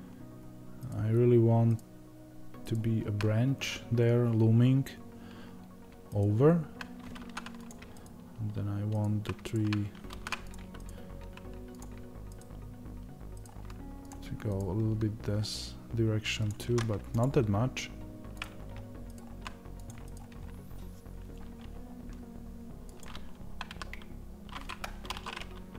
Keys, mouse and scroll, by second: 7.6 click, 7.9 ctrl+right click, 10.0 ctrl+z, 10.4 click, 10.8 ctrl+right click, 11.7 click, 12.3 ctrl+right click, 14.0 click, 14.5 ctrl+right click, 16.4 click, 19.1 ctrl+right click, 19.8 click, 20.0 ctrl+right click, 22.9 click.